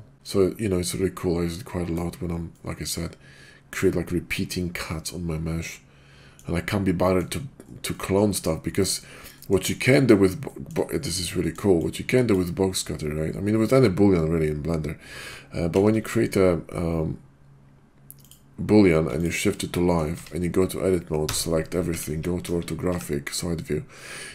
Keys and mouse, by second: 0.1 ctrl+z, 0.1 middle click, 0.8-1.9 middle drag, 2.4-3.6 middle drag, 5.0-6.3 middle drag, 7.0 middle drag, 7.9-8.4 middle drag, 8.6 middle drag, 9.3 middle click, 9.9 middle drag, 10.4 middle drag, 10.9 shift+drag, 11.4 middle click, 11.8-12.7 drag, 15.8 shift+t, 18.3 click, 19.2 shift+click, 19.7 drag, 20.1 Tab, 21.2 a, 21.8 `, 22.4 KP_5, 22.8 `.